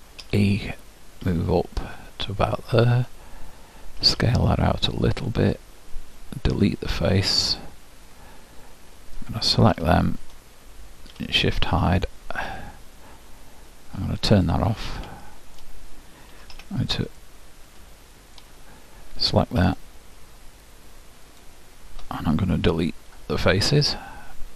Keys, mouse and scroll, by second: 0.3 e, 4.1 s, 6.5 Delete, 9.3-11.2 drag, 9.8 l, 11.2 shift+h, 13.0-16.3 drag, 15.3-17.2 middle drag, 16.4 z, 17.4-19.1 middle drag, 19.7-23.1 drag, 23.1 Delete.